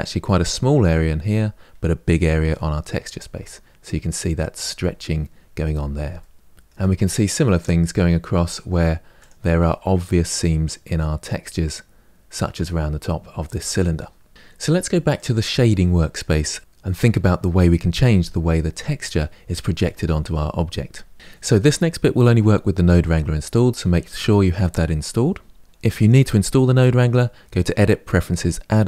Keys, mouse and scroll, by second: 2.9 Tab, 5.4-5.9 scroll down 2, 5.9-9.0 shift+middle drag, 9.0 click, 9.4-11.7 middle drag, 11.7-13.4 scroll up 1, 13.4-14.3 scroll down 2, 14.3-15.0 middle drag, 15.0 click, 16.6-28.8 middle drag.